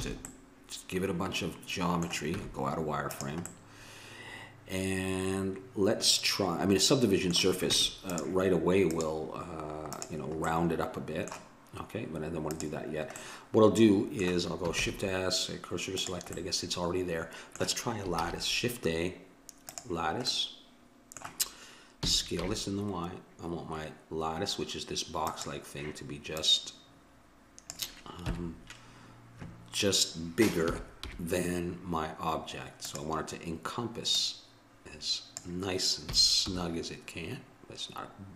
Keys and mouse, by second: 0.0 a, 2.4 z, 4.7 middle click, 7.7 Tab, 8.9-10.7 drag, 10.7-12.5 middle drag, 12.5-14.2 drag, 14.2 middle click, 14.8 shift+s, 15.8 click, 18.2 shift+a, 20.9-22.0 middle drag, 22.0 s, 26.4-28.1 drag, 28.2 KP_7, 30.7 s, 34.2-36.1 drag, 36.1 s.